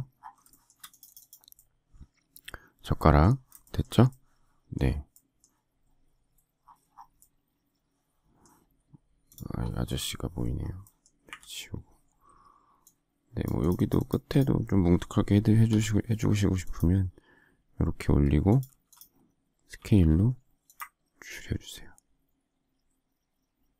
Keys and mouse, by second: 0.9 click, 1.5 middle click, 2.9 middle click, 9.8 click, 10.2 click, 11.2 Delete, 12.8 click, 15.6 p, 18.6 space, 19.7 s.